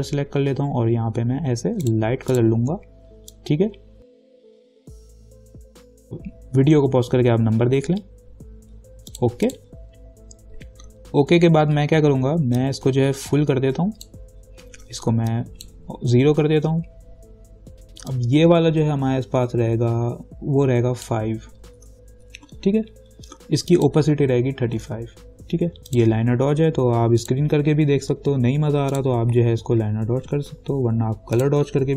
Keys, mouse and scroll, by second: 0.0-5.4 drag, 9.3 click, 12.8-18.3 drag, 18.3-22.0 drag, 22.0 5, 23.9 click, 24.7-25.5 typing, 26.1 click, 31.6 click.